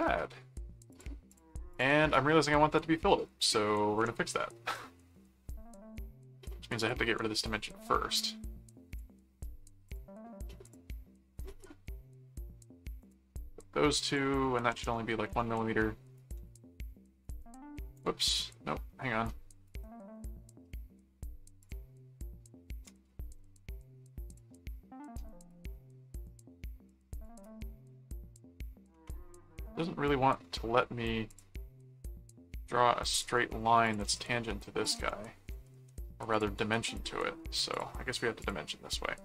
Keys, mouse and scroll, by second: 0.9 click, 4.0 ctrl+4, 6.8 click, 8.9 click, 9.8 click, 10.6 click, 13.0 click, 13.9 click, 16.2 right click, 17.3 right click, 18.3 ctrl+4, 19.6 right click, 21.6 shift+click, 24.3 click, 27.1 click, 29.6 right click, 31.3 click, 33.1 click, 33.8 alt+click, 34.0 alt+c, 34.8 ctrl+alt+click, 35.5 alt+a, 36.3 click, 36.6 right click, 37.7 click, 38.4 click.